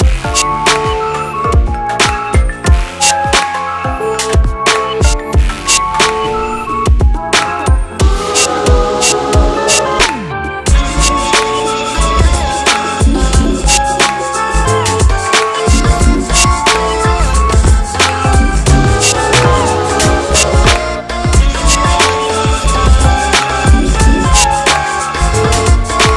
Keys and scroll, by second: 20.0 c.